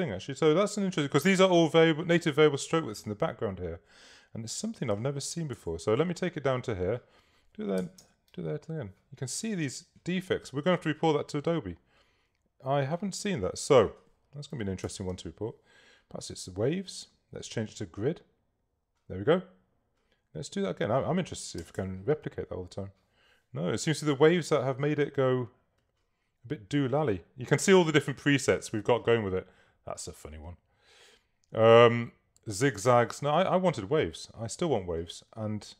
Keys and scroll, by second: 5.6 Tab, 7.9 0, 8.1 Tab, 14.3-15.2 typing, 21.7 0, 21.8 Tab.